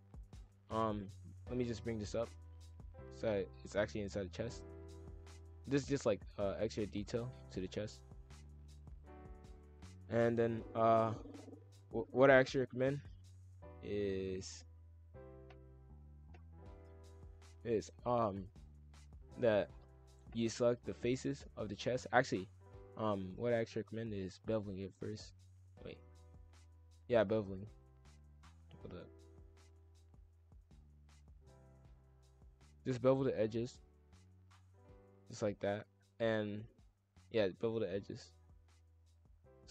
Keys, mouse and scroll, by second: 1.2 ctrl+l, 2.6 click, 3.5-5.8 middle drag, 5.8 KP_5, 5.9 KP_1, 6.6 s, 7.8-9.3 middle drag, 9.3 click, 9.7 scroll up 1, 9.9-11.1 middle drag, 11.1-12.1 drag, 12.9 shift+click, 14.8 shift+click, 15.6 F2, 17.0-19.6 middle drag, 19.6 click, 21.2-21.6 middle drag, 21.6-21.9 scroll up 2, 21.9-23.4 middle drag, 23.4-24.5 drag, 25.0 shift+click, 25.8 ctrl+z, 26.3 ctrl+z, 27.1 click, 27.6 shift+click, 28.2 ctrl+z, 29.2 shift+click, 29.7 scroll up 1, 29.8-30.9 middle drag, 30.9 shift+click, 31.4 shift+click, 31.8 middle click, 32.2 scroll down 3, 32.6-33.6 middle drag, 33.6 ctrl+b, 35.6 ctrl+z, 37.6 ctrl+b.